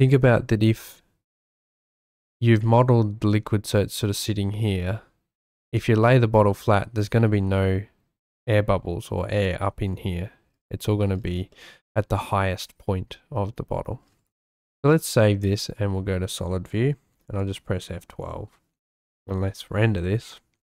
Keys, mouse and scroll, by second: 2.6 shift+middle click, 10.8 shift+middle click, 11.5 shift+middle click, 12.8 shift+middle click, 14.5 ctrl+s, 15.1 z, 17.2 F12.